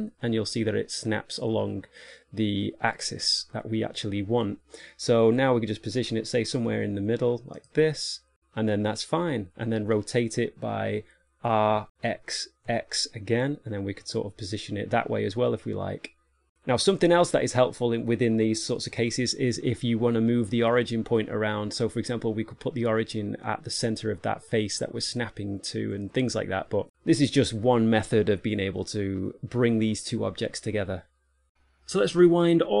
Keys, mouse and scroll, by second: 9.0 middle click, 11.6 r, 17.3 middle click, 31.2 middle click, 31.4 middle click, 32.0-32.8 typing, 32.3 shift+middle click, 32.5 click.